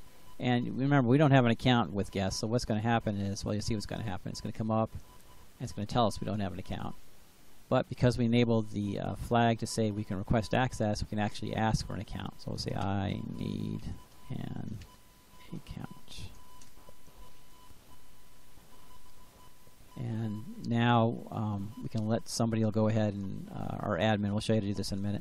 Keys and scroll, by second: 12.3-16.4 typing.